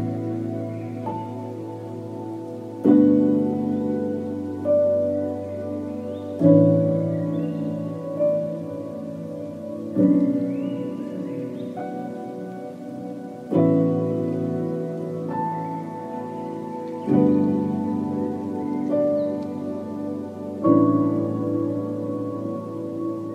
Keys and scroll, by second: 2.5 F2, 9.6 Tab, 11.4 Tab, 13.0 1, 13.3 Return.